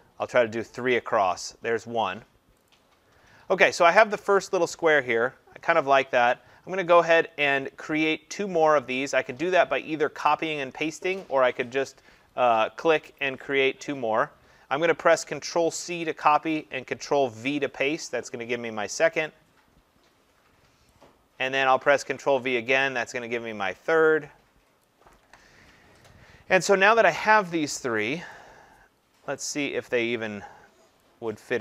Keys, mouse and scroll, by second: 0.8 click, 2.7 click, 6.3 click, 15.7 click, 16.0 ctrl+c, 17.5 ctrl+v, 20.9 click, 22.0 ctrl+v, 24.9 click, 28.3 click, 31.0 click.